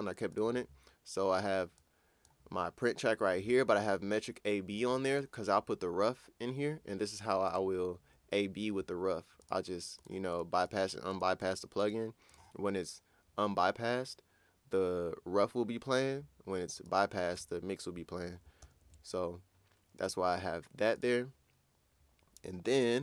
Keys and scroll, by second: 18.6 ctrl+super+w.